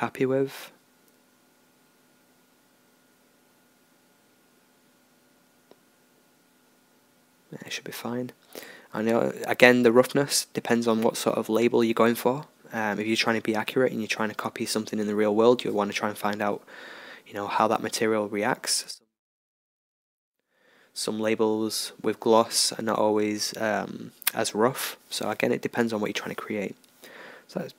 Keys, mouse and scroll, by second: 1.6-6.7 right drag, 7.9-9.0 middle drag, 9.0 ctrl+s, 12.3 middle click, 26.8-27.7 drag.